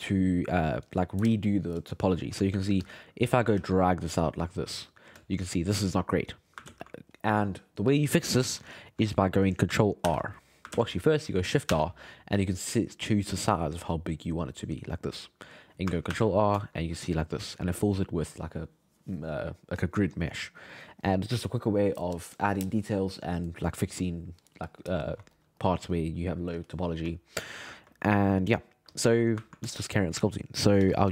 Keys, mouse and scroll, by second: 2.5 g, 2.7 f, 3.3 shift+middle click, 3.5 f, 4.1-5.2 drag, 5.2-6.7 shift+middle drag, 6.7 ctrl+z, 8.7 alt+middle click, 10.1 ctrl+r, 10.7 ctrl+z, 11.7 shift+r, 16.1 ctrl+r, 16.6-24.1 shift+middle drag, 25.3-27.2 middle drag, 27.8-28.9 shift+middle drag, 28.9 click, 29.5-30.8 ctrl+shift+middle drag, 30.8 f.